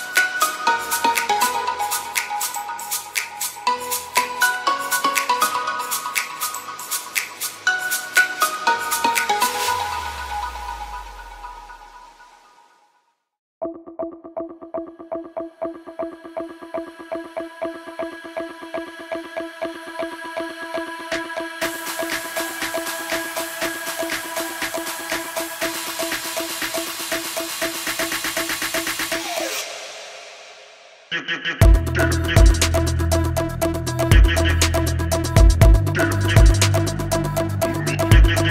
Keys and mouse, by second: 1.4 a, 1.6 b, 3.0-4.6 drag, 4.6 b, 6.1 shift+click, 6.5 a, 7.1 shift+click, 7.2 b, 8.1 e, 9.1 ctrl+z, 9.6 b, 10.2 e, 11.1-12.2 drag, 12.4 shift+click, 13.2 shift+click, 13.9 shift+click, 15.1 b, 16.1 a, 16.3 b, 17.4 a, 17.6 b, 18.1 g, 19.6 shift+drag, 20.8 shift+click, 21.5 b, 22.8-25.1 drag, 25.1 e, 26.0 click, 27.1 a, 27.3 b, 27.8 shift+drag, 28.5-29.5 drag, 30.3 e, 32.1 r, 32.9 g, 33.9 a, 34.1 b, 34.6 shift+click, 35.0 r, 36.1-38.5 typing, 38.2 shift+click.